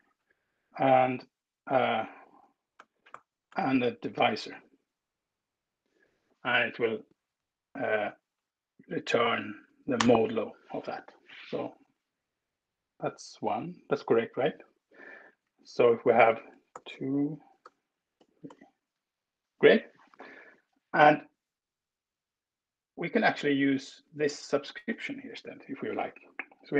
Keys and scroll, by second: 1.9 BackSpace, 2.7 space, 3.1 1, 3.5 space, 6.7 Right, 8.9 Up, 9.6 alt+Return, 14.5 Escape, 14.9 Left, 15.1 Left, 15.3 Left, 16.1 BackSpace, 16.5 alt+Return, 17.3 BackSpace, 18.2 BackSpace, 18.3 alt+Return, 19.5 Escape, 25.1 Left, 26.5 ctrl+Return.